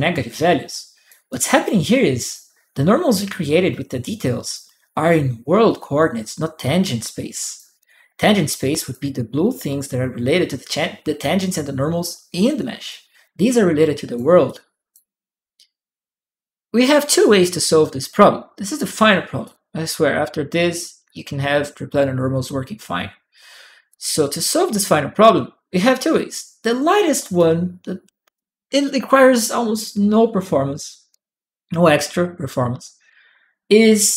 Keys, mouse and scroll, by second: 1.1 right click, 1.6 click, 3.6 click, 6.3 click, 7.6 right click, 8.5 click, 12.6 right click, 13.2 click, 14.2 click, 19.2 click, 23.7 click, 27.1 right click, 27.2 click, 30.9 click.